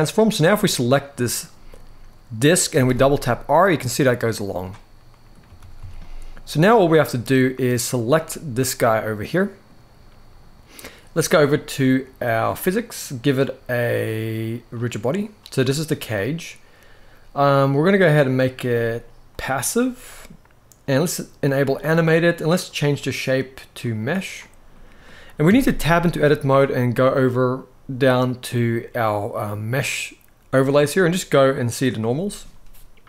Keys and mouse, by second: 2.4 r, 2.5 r, 4.1-4.6 right drag, 4.8 middle click, 5.3 ctrl+s, 5.5 ctrl+s, 5.7 middle click, 7.7 click, 8.5-9.4 middle drag, 12.2 click, 14.4 click, 18.1 click, 18.4-19.1 drag, 21.3 click, 22.3-23.7 drag, 24.4 middle click, 25.2 Tab, 27.0-31.7 drag, 32.1-33.0 middle drag.